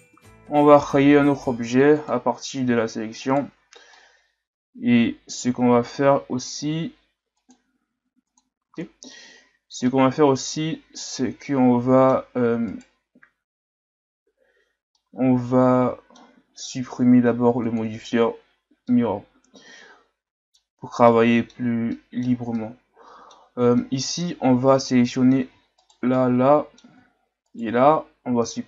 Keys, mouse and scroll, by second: 0.3 Tab, 1.4 p, 2.7 Tab, 3.2 right click, 3.9-7.0 middle drag, 7.3 click, 8.8-9.4 middle drag, 9.4-9.9 scroll up 1, 9.9-11.2 middle drag, 11.2 Tab, 11.4-12.7 middle drag, 12.7 right click, 14.9-17.6 middle drag, 17.6 click, 18.9-23.6 middle drag, 23.6 scroll up 2, 23.8 middle click, 24.8 shift+right click, 25.8 shift+right click, 26.2-27.5 middle drag, 27.5 shift+right click, 28.3 x.